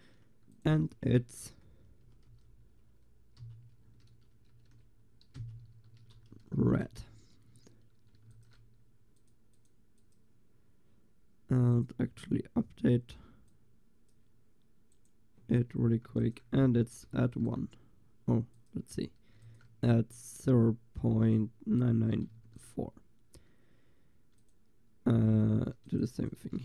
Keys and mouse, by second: 4.7 shift+2, 8.3 ctrl+s, 9.2-11.7 drag, 11.8 click, 13.5-16.2 drag, 16.2 ctrl+s, 17.2 ctrl+s, 18.6-20.4 drag, 19.4 ctrl+s, 22.4 ctrl+s, 24.4-26.6 drag.